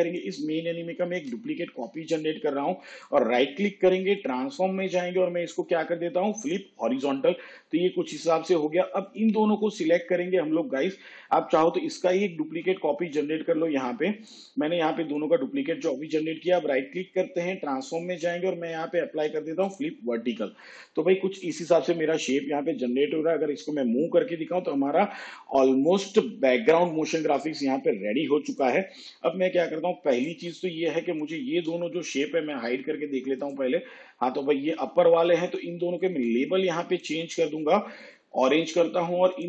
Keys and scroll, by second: 1.4 ctrl+d, 12.7 ctrl+d.